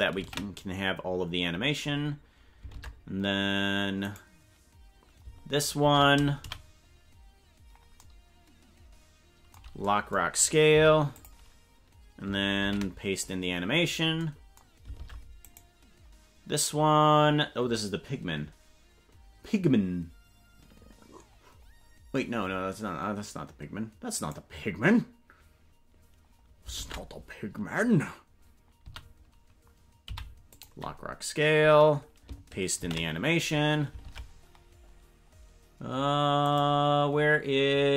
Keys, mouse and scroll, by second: 0.3 ctrl+v, 2.7 ctrl+Tab, 4.0 right click, 5.8 ctrl+Tab, 6.4 a, 10.7 i, 12.6 ctrl+v, 14.9 ctrl+Tab, 15.4 right click, 24.3 right click, 26.7 ctrl+Tab, 28.8 a, 30.1 i, 32.9 ctrl+v, 34.0 ctrl+Tab, 34.5-34.9 scroll up 3, 36.4 right click.